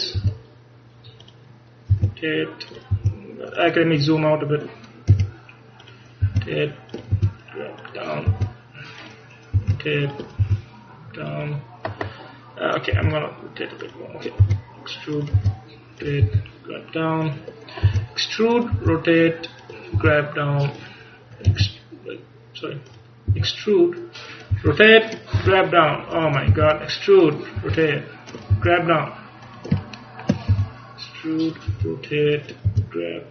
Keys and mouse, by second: 0.3 e, 2.0 r, 3.1 g, 5.2 e, 6.4 r, 7.3 g, 8.4 e, 9.1-13.7 drag, 9.7 r, 10.5 g, 13.1 r, 14.5 e, 15.5 r, 16.3 g, 18.0 e, 18.8 r, 20.1 g, 21.6 r, 23.4 e, 24.6 r, 25.4 g, 26.6 e, 27.7 r, 28.6 g, 30.6 e, 31.8 r, 32.7 g.